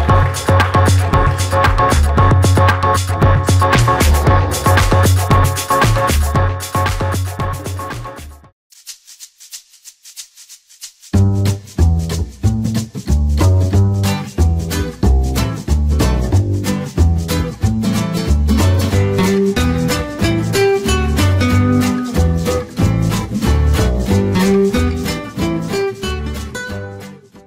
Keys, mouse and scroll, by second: 3.3 shift+middle click, 4.6 shift+middle click.